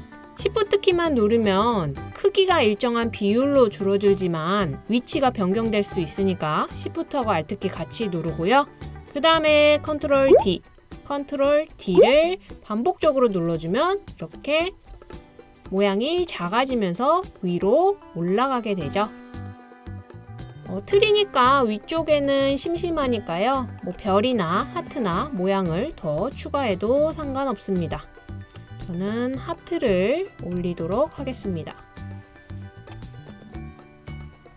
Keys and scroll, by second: 10.3 super+d, 11.9 super+d, 14.7 super+d.